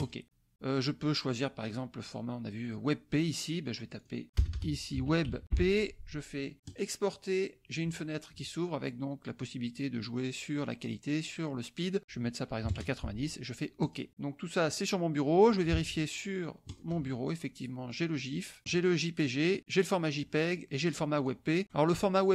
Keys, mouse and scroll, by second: 0.0 click, 4.0 click, 4.3-5.9 typing, 6.6 click, 12.0 click, 12.6 KP_9, 13.8 click, 15.7 alt+Tab, 16.6 alt+click, 17.9 click, 21.2 click, 21.6 right click.